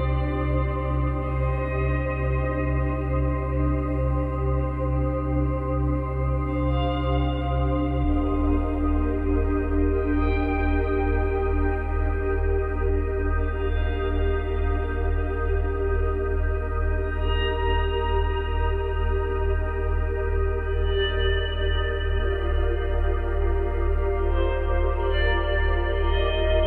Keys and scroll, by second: 1.0 space, 9.9 space, 12.2 space, 22.6 space, 25.6 space.